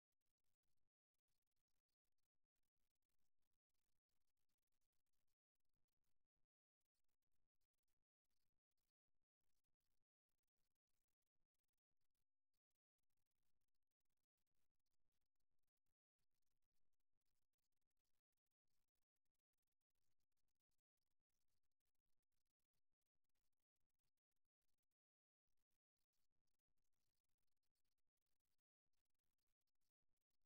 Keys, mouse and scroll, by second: 0.4-3.8 middle drag, 4.8 g, 6.4-11.7 middle drag, 14.9 s, 15.3-17.1 scroll down 1, 18.2-20.1 drag, 19.1 s, 21.0-23.0 middle drag, 23.4 middle click, 24.5-26.3 middle drag.